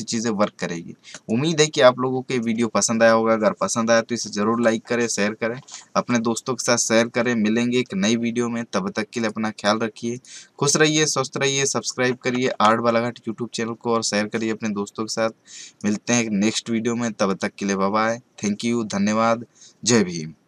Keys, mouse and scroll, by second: 1.1 click, 9.1 click, 15.2-17.3 drag.